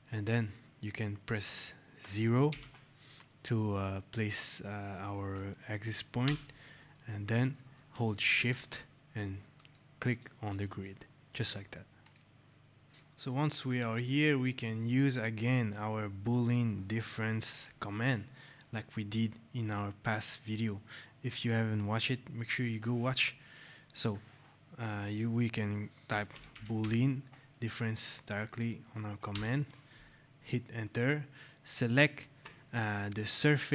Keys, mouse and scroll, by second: 6.1 Return, 9.4 shift+click, 11.9 click, 12.6 scroll, 12.9 click, 13.2 right click, 25.7-27.3 typing, 29.2 Return.